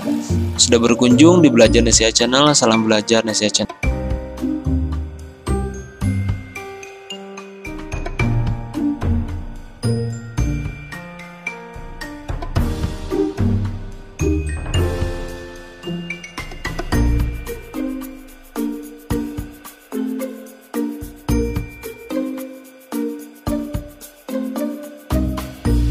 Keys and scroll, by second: 3.7 ctrl+g.